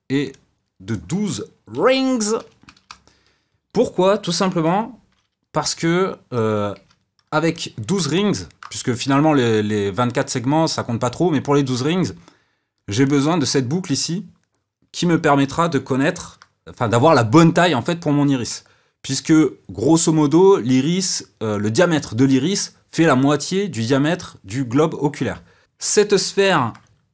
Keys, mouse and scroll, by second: 0.2-3.3 drag, 5.0 KP_7, 6.7 Tab, 7.5-13.0 ctrl+middle drag, 13.0 click, 13.2-16.2 drag, 16.2 shift+z, 25.6 Tab, 26.5 shift+z.